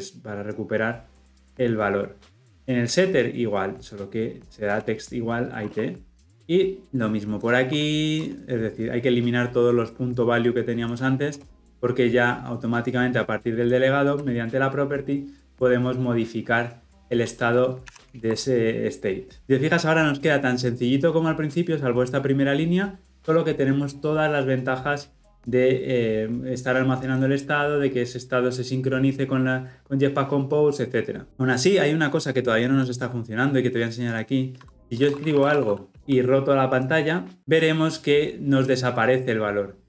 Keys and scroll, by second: 17.8 ctrl+alt+l, 18.0 ctrl+alt+o.